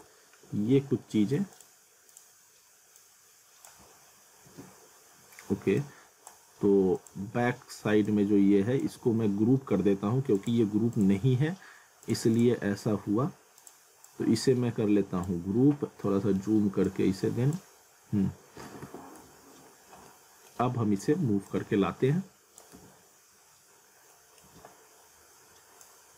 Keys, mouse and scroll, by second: 0.1 alt+middle click, 0.7 scroll down 1, 1.0 alt+middle click, 1.5 click, 4.5 ctrl+z, 5.8 click, 7.0 click, 9.0 ctrl+z, 10.4 click, 12.9-13.2 scroll down 1, 13.6 click, 15.5 scroll up 1, 16.1 middle click, 16.8 click, 17.8 scroll down 1, 18.6 alt+w, 19.3 z, 19.6 scroll down 1, 20.1 middle click, 21.5 click, 22.7 z, 23.7 scroll up 1, 24.1 middle click, 24.5 e, 25.8 click.